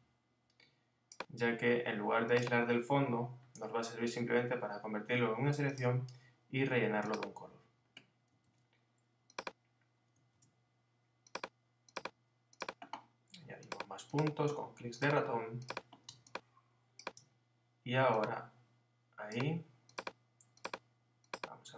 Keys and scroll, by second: 3.3 Left, 8.4 super+z.